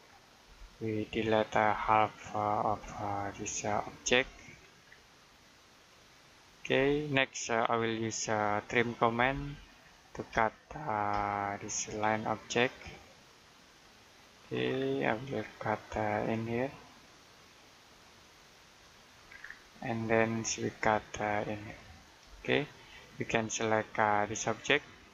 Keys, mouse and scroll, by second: 0.3 Delete, 0.9 click, 1.5 Delete, 2.0 click, 2.5 Delete, 3.1 click, 3.9 Delete, 4.1 click, 4.7 scroll down 1, 4.9 middle click, 5.6 click, 6.6 Delete, 6.9-7.4 scroll down 1, 7.4 middle click, 9.1 typing, 10.2 space, 11.6-12.3 scroll up 1, 12.3 middle click, 13.5 click, 14.6-15.0 scroll down 1, 15.0 middle click, 15.7-16.0 scroll up 1, 16.9 click, 19.2 scroll down 1, 19.5 middle click, 20.5-21.4 scroll up 1, 21.5 click, 22.1 space, 22.2-22.6 scroll down 1, 22.6 middle click, 23.5 click.